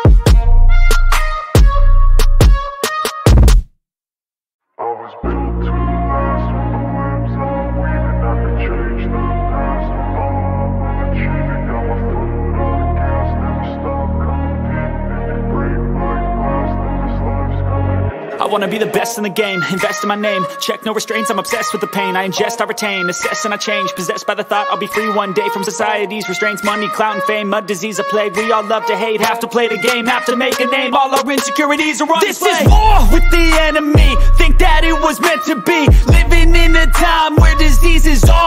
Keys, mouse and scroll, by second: 0.9 click, 1.7 click, 1.9 click, 3.7 click, 3.9 click, 7.4-9.5 drag, 10.3-11.9 drag, 13.6 click, 14.7 click, 15.1 click, 18.7 click, 19.8 click, 22.1 click, 23.8 click, 25.1 click, 26.8 click, 28.4 click, 29.5 click, 31.1 click.